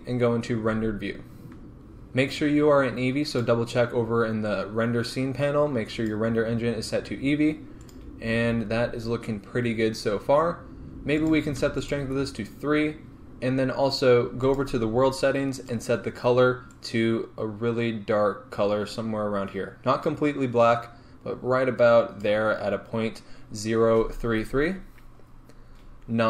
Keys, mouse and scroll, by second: 1.6 click, 3.4 click, 6.0-8.0 drag, 8.5-8.9 scroll down 2, 8.9 scroll up 2, 9.6-10.2 scroll down 2, 10.2 scroll up 2, 11.2 click, 14.5 click, 15.6 click, 25.2-25.9 scroll down 1, 25.9-26.2 scroll up 1.